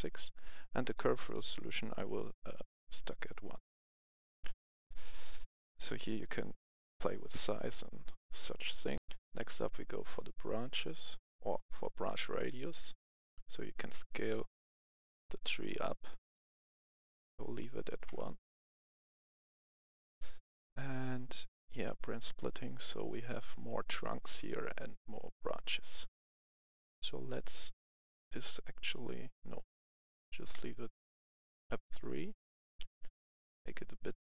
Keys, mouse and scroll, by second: 4.2 scroll down 1, 4.9 scroll up 1, 5.1 scroll down 1, 5.4-5.8 scroll up 1, 7.4 scroll down 1, 8.2-8.9 scroll up 1, 8.9 F11, 9.6-16.6 drag, 17.4 KP_1, 18.0 Return, 19.8 click, 25.6-27.7 scroll down 1, 27.9-34.2 drag.